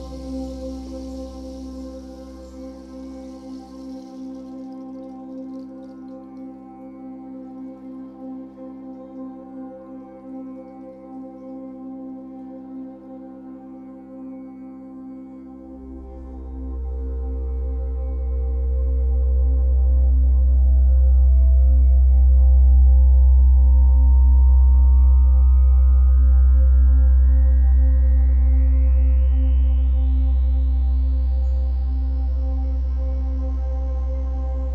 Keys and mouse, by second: 10.5 i, 11.8-14.4 drag, 15.0-19.0 drag, 20.2 g, 23.3 click, 24.6 click, 25.5-31.8 drag, 32.3 ctrl+alt+click, 33.0 click, 33.4 alt+click.